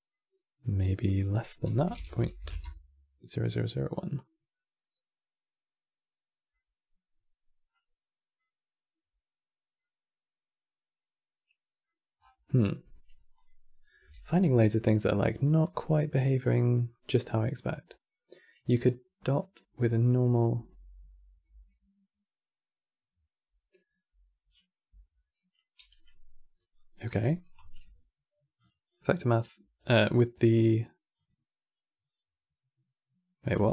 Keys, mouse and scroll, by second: 0.8-1.8 drag, 1.8 KP_0, 1.9 KP_0, 3.4-6.4 middle drag, 7.4-9.5 drag, 9.5-11.9 middle drag, 11.9 scroll down 4, 12.2-13.1 middle drag, 13.1 click, 21.2 m, 26.4-26.9 drag, 26.9-27.3 middle drag, 27.3 q, 29.5-30.8 middle drag, 30.8 click, 31.8-33.7 drag.